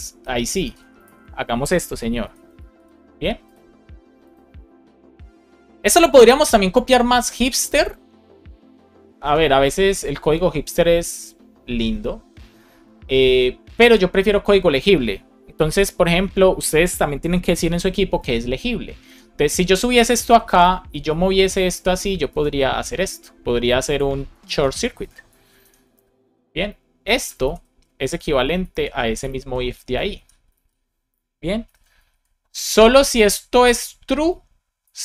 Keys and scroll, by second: 0.5 super+v, 0.9 super+s, 2.1 alt+shift+f, 2.6 super+s, 18.9 alt+Up, 19.6 Down, 19.9 Right, 20.9 shift+super+Right, 21.3 shift+Left, 22.2 super+x, 24.4 super+v, 24.9 space, 25.4 shift+7, 25.8 space, 27.0 super+Right, 27.3 shift+super+Left, 27.6 super+x, 28.0 Down, 28.6 shift+super+Left, 29.1 shift+super+Left, 29.5 shift+Up, 30.0 super+v, 30.4 super+s, 31.5 alt+shift+f, 32.0 super+s.